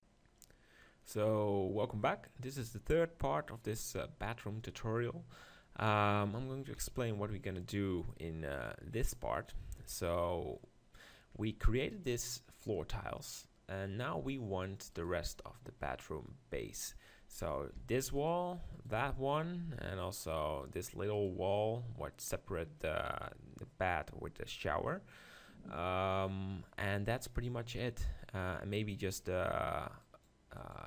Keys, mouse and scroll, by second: 8.5-9.8 drag, 9.8 KP_7, 10.6 middle click, 12.0-13.8 right drag, 13.8 middle click, 15.1-16.9 right drag, 17.8 g, 18.8-21.9 right drag, 18.9 g, 19.8-23.0 drag, 21.9-26.8 middle drag, 30.6-30.8 drag.